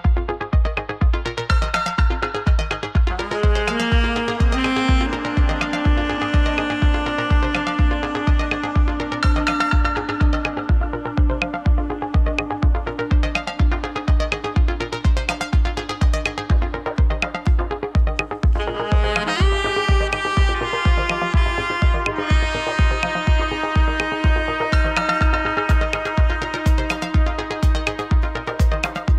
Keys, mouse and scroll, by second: 0.4-1.5 middle drag, 1.5 click, 2.4 click, 2.8-3.5 middle drag, 3.5 r, 4.1 click, 4.2-5.2 middle drag, 5.2 drag, 5.4 r, 5.9 click, 6.0-7.0 middle drag, 7.2 click, 7.3-7.8 middle drag, 7.8 r, 8.5 click, 8.7-9.9 middle drag, 10.8 `, 11.4 `, 12.4-13.3 middle drag, 13.6 drag, 18.4 shift+a, 19.6-20.8 drag, 21.0-22.0 drag, 22.4 s, 22.9 s, 24.4 s, 26.4 g, 27.6 click, 28.6 Tab, 28.9 click.